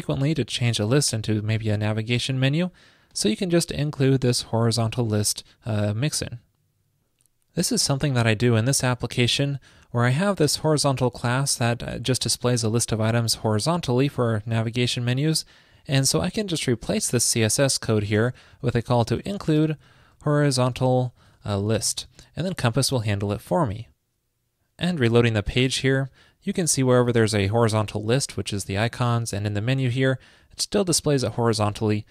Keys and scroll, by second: 22.3 super+s.